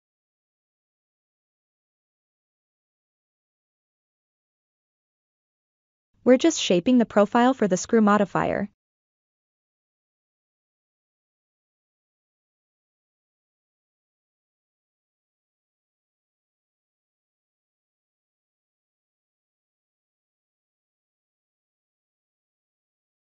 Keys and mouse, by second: 0.4 e, 5.4 ctrl+middle click, 6.7 ctrl+click, 7.5 ctrl+click, 8.7 ctrl+click, 9.7 ctrl+click, 10.7 ctrl+click, 12.0 e, 17.2 click, 19.1 e.